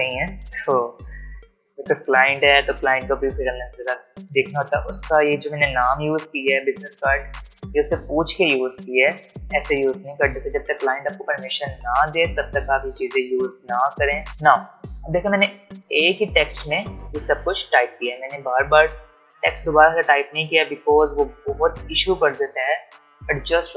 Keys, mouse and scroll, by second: 8.6-9.6 alt+scroll down 1, 10.8 space, 10.9 click, 11.3 space, 13.6-14.1 alt+scroll down 1.